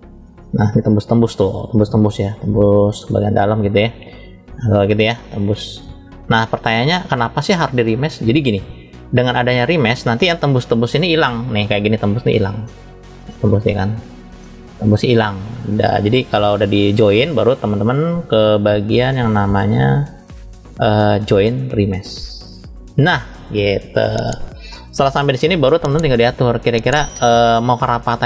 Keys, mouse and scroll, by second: 0.3 scroll up 1, 0.4-1.3 shift+middle drag, 2.1-2.9 middle drag, 3.2-4.8 middle drag, 4.8-5.6 scroll down 1, 6.2-7.3 middle drag, 6.2 scroll down 3, 7.8-8.5 scroll up 2, 8.6-9.6 shift+middle drag, 10.2-10.8 scroll up 1, 12.6-13.6 middle drag, 14.2-15.5 middle drag, 18.4-19.4 drag, 20.0 click, 20.7-22.2 drag, 27.6-28.2 middle drag.